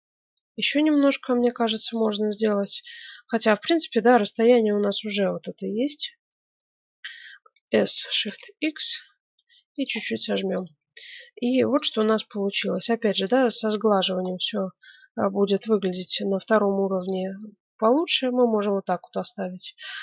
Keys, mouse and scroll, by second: 6.5-8.2 middle drag, 7.5 s, 9.9 click, 10.2 middle click, 10.6 Tab, 13.1 click, 14.2 click, 14.2-16.1 right drag, 15.3 click, 17.3-19.3 middle drag.